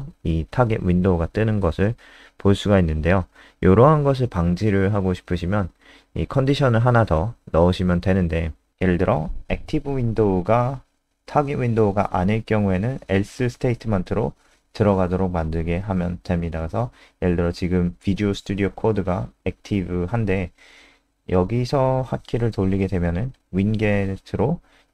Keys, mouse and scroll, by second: 0.8 Up, 6.8 click, 19.3-20.7 typing, 22.9-24.9 typing.